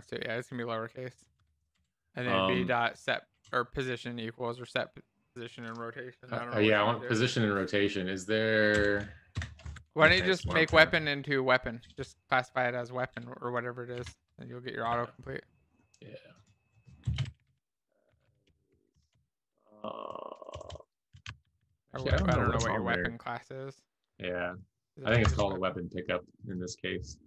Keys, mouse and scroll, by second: 0.0-1.8 typing, 3.5 BackSpace, 9.4 BackSpace, 9.7 Escape, 10.0 Up, 10.4 End, 10.7 Left, 11.2 Left, 11.7 Left, 11.7 Left, 11.8 Left, 14.0 Page_Down, 17.2-19.6 typing, 20.4 Down, 20.6 Down, 22.1 Escape.